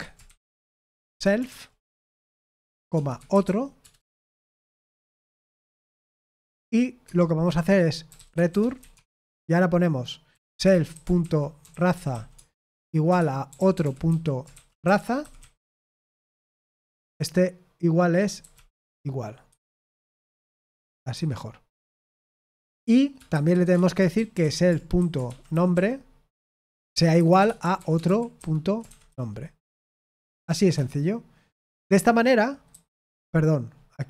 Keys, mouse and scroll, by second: 0.0-20.9 typing, 16.7 Escape, 21.1 Escape, 22.2-29.7 typing, 26.3 Tab, 30.3 Tab, 30.7 Escape, 32.6 typing.